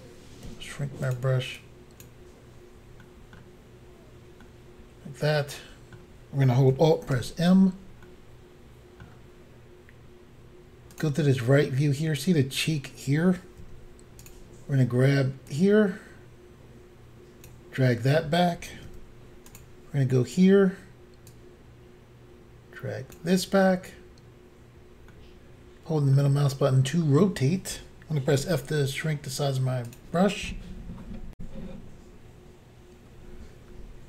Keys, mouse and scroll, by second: 0.5 f, 1.1 click, 1.2 click, 1.6 click, 3.1 middle click, 4.4 middle click, 7.1 alt+m, 8.1 middle click, 10.9 click, 11.0 click, 11.6 scroll up 2, 13.6 f, 14.2 click, 15.5 click, 18.9 f, 19.5 click, 19.6 click, 21.3 click, 24.4 scroll down 2, 25.1 middle click, 26.3-27.4 scroll down 2, 28.4 f, 29.9 click, 30.0 click, 31.4 Insert.